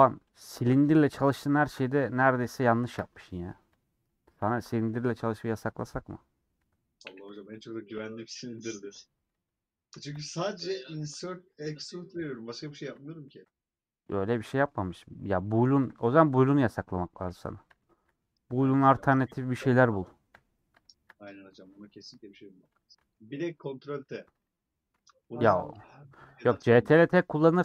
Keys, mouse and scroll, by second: 0.3 click, 1.0 KP_Decimal, 1.6-2.5 scroll down 11, 2.5 a, 4.0 click, 4.7 /, 5.1 middle click, 5.6 Tab, 5.8 middle click, 6.6 3, 7.0 middle click, 7.4 3, 10.2 ;, 10.6 middle click, 11.1 3, 13.3 ctrl+z, 14.1 ;, 14.6-15.9 middle drag, 15.9 3, 16.1-17.3 alt+drag, 17.3 ;, 17.8-18.9 shift+middle drag, 18.9 3, 20.4 ;, 20.9-22.1 shift+middle drag, 22.1 3, 22.5 scroll down 2, 22.8-25.4 middle drag, 25.4 click, 25.6 middle click, 26.3 2, 26.4 click, 27.3 middle click.